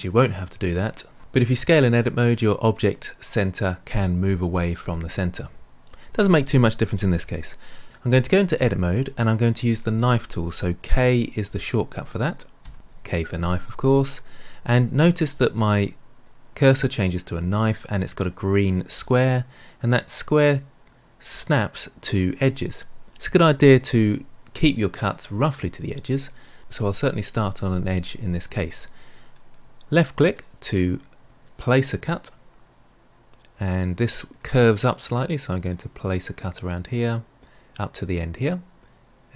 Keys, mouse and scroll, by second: 8.5 Tab, 12.6 k.